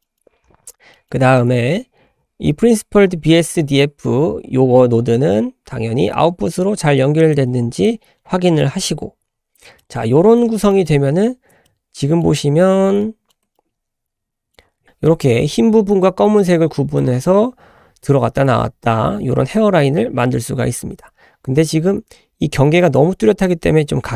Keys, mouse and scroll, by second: 0.0 middle click, 0.4-0.8 scroll up 3, 0.9 middle click, 1.1-1.6 scroll up 3, 2.1-2.5 scroll down 4, 2.7-3.7 scroll up 6, 4.7 scroll up 2, 7.2 click, 7.4 g, 9.0-9.6 scroll down 3, 9.6 middle click, 9.8-10.2 scroll down 3, 10.7 middle click, 11.6 middle click, 13.0 shift+middle click, 13.6 ctrl+middle click, 14.3 ctrl+click, 14.6 ctrl+middle click, 14.8 scroll up 6.